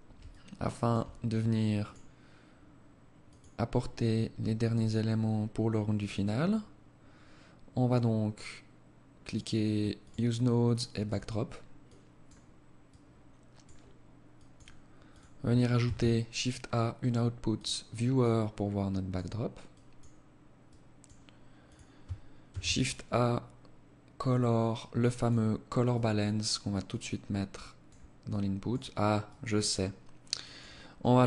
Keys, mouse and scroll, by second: 30.8 click.